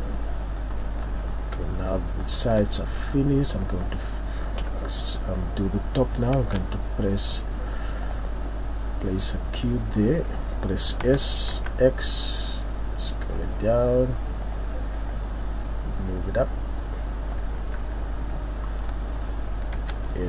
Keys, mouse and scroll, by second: 0.3 middle click, 0.7-1.1 scroll down 3, 1.1 middle click, 1.6 scroll up 1, 2.0-2.6 scroll down 4, 2.8 middle click, 3.1-3.7 scroll up 3, 3.8 scroll down 2, 4.7 KP_3, 6.4 shift+a.